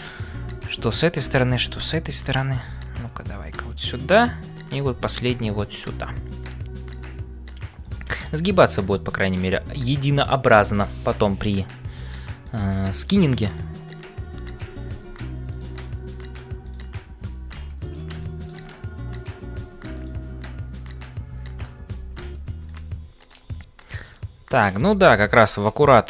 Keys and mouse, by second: 0.0-26.0 typing, 8.4 middle click, 9.7 middle click, 12.4 middle click, 13.5 click, 18.2 middle click, 19.2 click, 22.6 middle click, 23.8 click, 24.2 middle click.